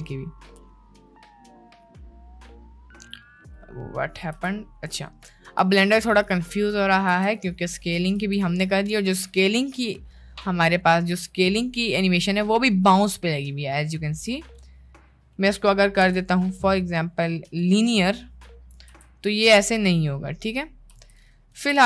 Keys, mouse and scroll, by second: 0.6-4.2 drag, 4.4 space, 5.6 space, 6.0-6.7 drag, 7.1 space, 8.3 space, 9.6 middle click, 14.7 middle click, 16.0 t, 18.6 drag, 19.0 space, 21.0 space.